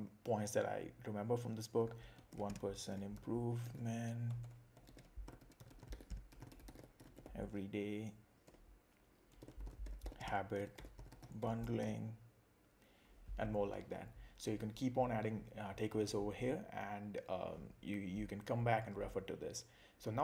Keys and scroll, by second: 2.3 shift+5, 8.5 Return, 9.4 shift+h.